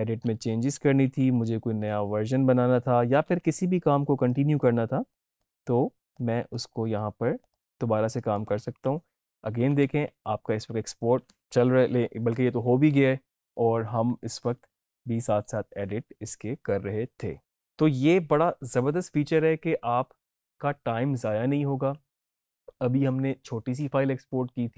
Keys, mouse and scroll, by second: 4.2-8.9 drag, 9.7 alt+Tab, 14.1 alt+Tab.